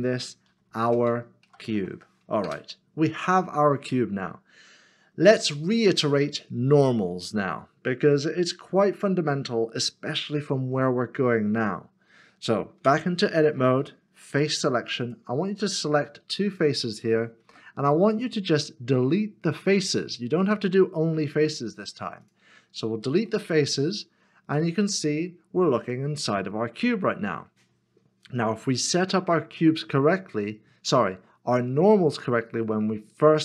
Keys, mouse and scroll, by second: 0.0-2.0 typing, 2.4 Return, 5.3 middle click, 12.8 Tab, 14.3 3, 15.7 shift+click, 18.5 x, 23.3 middle click.